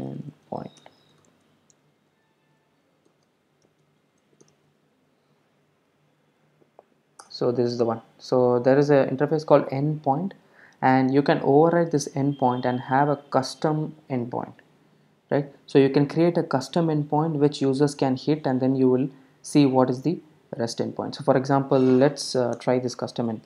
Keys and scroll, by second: 3.1 super+o, 22.6 alt+Return.